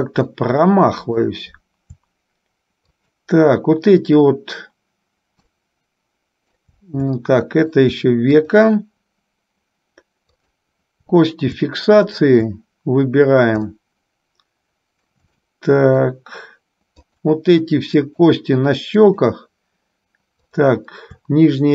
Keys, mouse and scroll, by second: 0.7 middle click, 3.0 shift+click, 5.7-7.0 middle drag, 7.4 middle click, 8.7 shift+click, 10.5 shift+click, 12.4 shift+click, 13.9-15.3 middle drag, 15.7 shift+middle click, 17.3 shift+click, 18.3 shift+click, 19.3 shift+click, 20.7 shift+click.